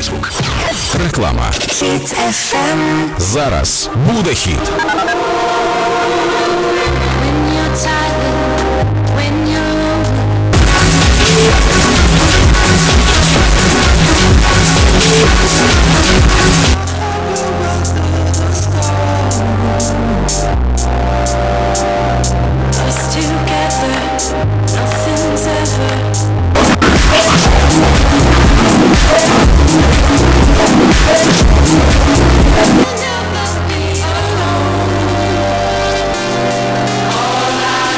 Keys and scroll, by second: 16.7 Page_Down, 32.9 Page_Down.